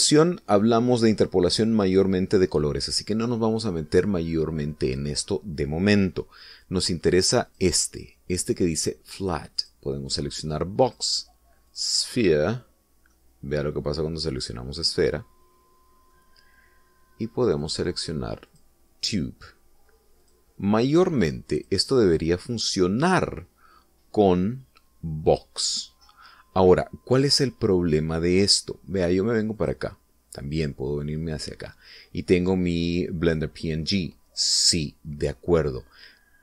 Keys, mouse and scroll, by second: 0.2-0.7 scroll up 1, 0.7 middle click, 0.9-3.6 scroll down 2, 8.5 click, 10.6 click, 11.8 click, 12.8 click, 13.9 scroll down 1, 14.2-17.3 middle drag, 17.3-18.6 scroll down 2, 18.6 click, 19.6 click, 21.3 click, 22.6 click, 30.6 click.